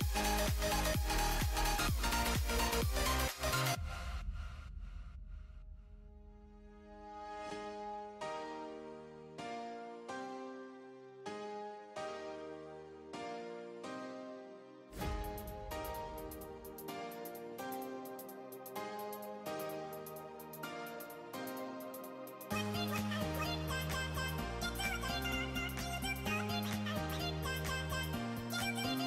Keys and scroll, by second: 14.2 super+t, 15.0 shift+super+t.